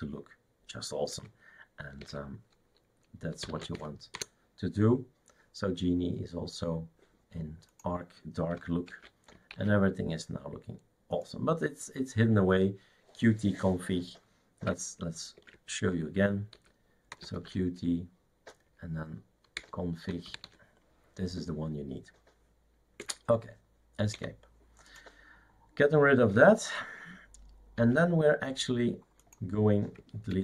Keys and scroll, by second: 2.0 shift+super+d, 3.3-4.2 typing, 9.1 shift+super+q, 9.5 shift+super+q, 15.4 shift+super+d, 16.6-17.8 typing, 19.6-20.9 typing, 23.0 Escape, 24.2 Escape, 28.0 shift+super+q.